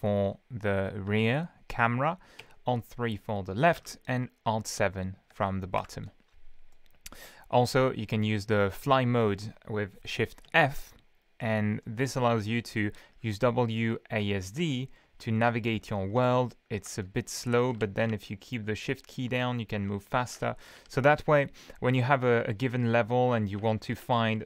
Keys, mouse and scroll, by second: 2.4 alt+KP_3, 3.8 alt+KP_7, 5.8 alt+KP_7, 6.7-7.5 middle drag, 7.6-8.0 scroll up 2, 8.6-9.0 scroll down 2, 10.5 shift+f, 11.4-12.9 middle drag, 13.1-15.7 typing, 17.1-18.7 typing, 20.4 s, 20.8 shift+d, 23.3-24.4 typing.